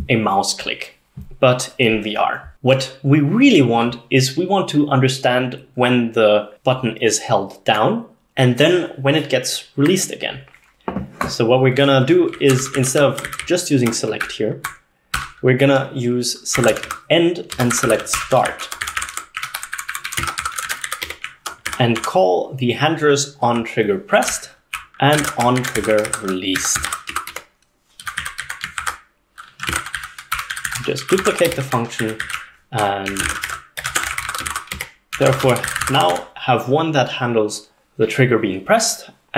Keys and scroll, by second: 12.1-15.2 typing, 16.4-21.8 typing, 23.2-27.9 typing, 28.3 Escape, 28.5 Escape, 28.8 ctrl+s, 29.5-38.1 typing.